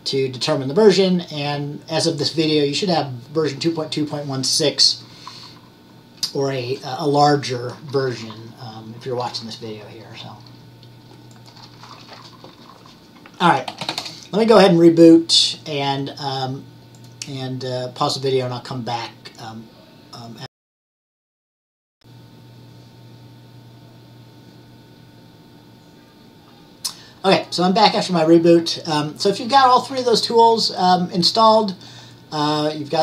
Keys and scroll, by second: 13.3-14.5 typing.